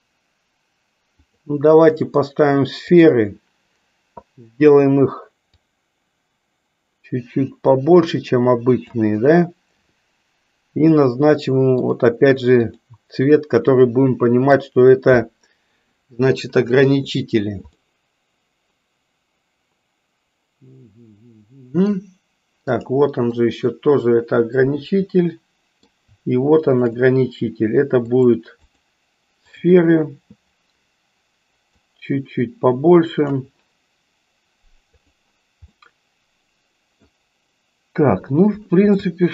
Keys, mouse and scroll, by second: 2.9 click, 5.5-8.9 drag, 12.8 click, 13.6 middle click, 17.9-21.8 middle drag, 22.6 click, 23.4-26.0 middle drag, 26.5 shift+click, 28.2 click, 29.4 click, 31.7-33.5 drag, 35.0 click, 35.8-37.0 middle drag, 39.0-39.3 shift+middle drag.